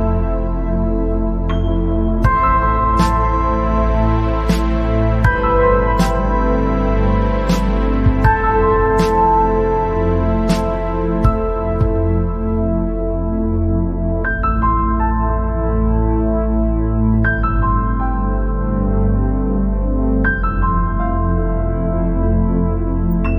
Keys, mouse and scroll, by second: 0.1-4.2 drag, 5.6 click, 7.1 click, 8.0 scroll up 3, 8.3 scroll down 3, 8.5 middle click, 9.1 scroll up 1, 9.5 scroll down 1, 9.7 middle click, 10.5 click, 11.3 click, 12.6 click, 13.3-14.2 scroll down 1, 14.2 scroll down 1, 14.7 click, 15.6-21.0 drag, 21.0 BackSpace.